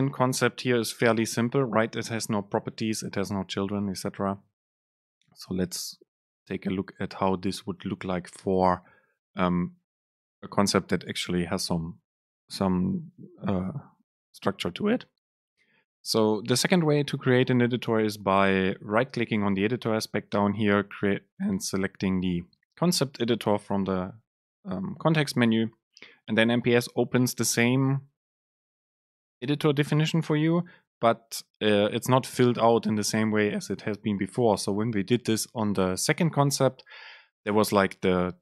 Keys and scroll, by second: 0.9 super+b.